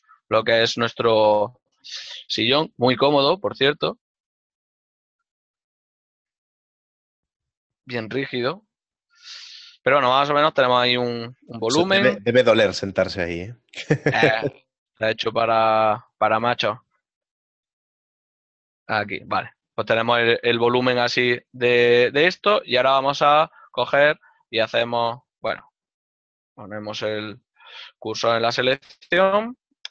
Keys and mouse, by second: 5.4 right click, 6.4 alt+right click, 9.7 click, 11.3 alt+right click, 16.9 g, 21.4 ctrl+middle click.